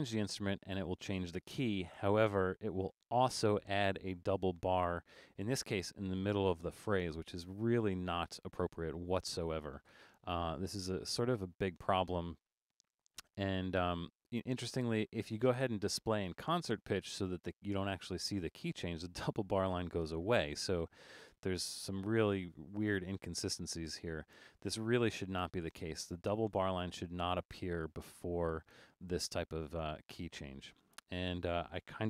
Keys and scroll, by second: 2.8 super+=.